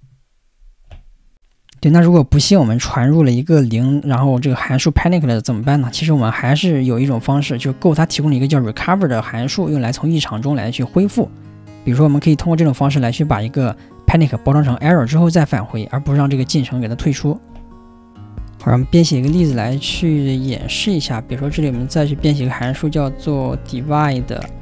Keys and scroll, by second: 22.1 4.